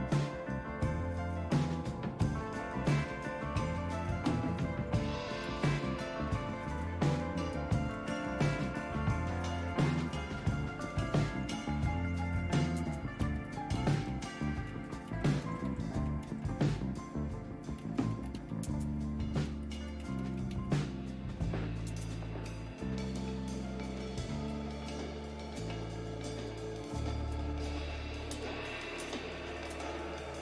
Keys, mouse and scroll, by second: 8.0-21.8 typing, 24.5-26.9 typing, 28.1-30.2 typing.